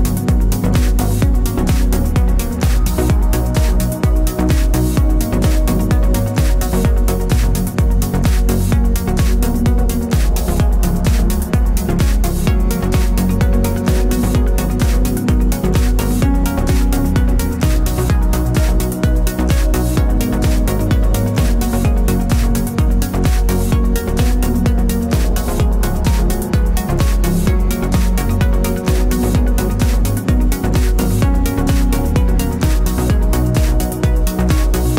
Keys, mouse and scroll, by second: 1.5 Tab, 4.4 click, 4.6 s, 6.0 click, 6.2 s, 8.7 click, 11.9 ctrl+shift+z, 12.5 ctrl+r, 14.6-16.7 middle drag, 14.8-15.3 scroll up 3, 16.7 click, 17.4 3, 17.8 click, 18.1 middle click, 18.4 shift+click, 18.6-21.2 middle drag, 19.4 s, 21.2 click, 21.7 2, 22.1 alt+click, 22.4 alt+shift+click, 22.7 s, 24.1-25.4 middle drag, 25.4 alt+click, 26.0 3, 26.3 click, 26.5 middle click, 27.1 shift+click, 27.4-31.3 middle drag, 28.6 g, 30.3 Tab, 31.0 scroll down 1, 31.9 scroll down 1, 32.6 ctrl+s, 33.2 shift+middle click, 33.6 scroll up 1, 33.8 middle click.